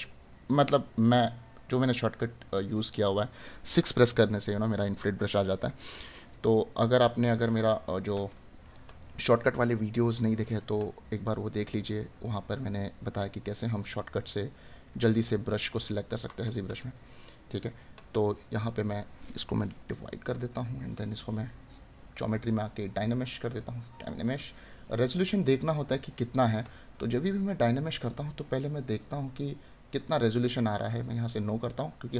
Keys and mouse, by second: 6.8 right click, 12.5 right click, 20.3 right click, 26.1 right click.